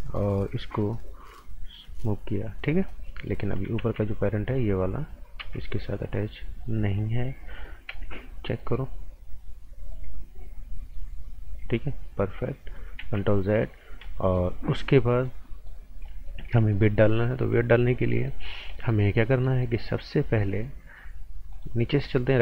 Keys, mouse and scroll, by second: 1.4 click, 3.0 right click, 3.8 ctrl+z, 4.5 click, 5.4 p, 6.8 click, 7.9 z, 8.6 right click, 9.2 click, 9.9 right click, 13.0 ctrl+z, 13.4 right click, 13.8 scroll up 1, 14.0 right click, 14.5 scroll up 1, 14.7 right click, 16.7 right click, 21.5 click, 22.1 right click.